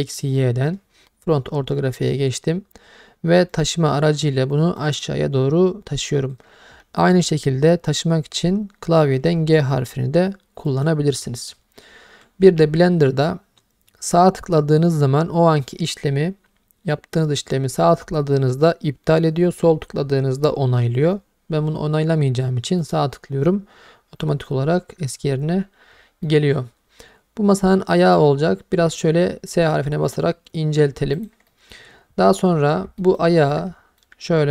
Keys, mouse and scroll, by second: 0.1 click, 3.5 click, 4.8 click, 9.3 g, 10.7-12.3 right drag, 12.4 g, 22.8-25.9 right drag, 26.3-28.2 middle drag, 28.8 s, 31.2 click, 31.5 middle click, 33.0 middle click, 33.2-33.5 scroll down 1, 33.5 middle click.